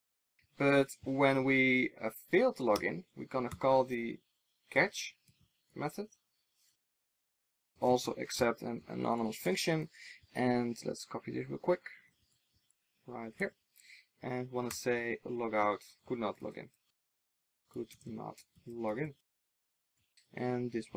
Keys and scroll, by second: 9.4 Tab, 12.1 super+c, 13.3 super+v, 19.0 ctrl+alt+shift+Right.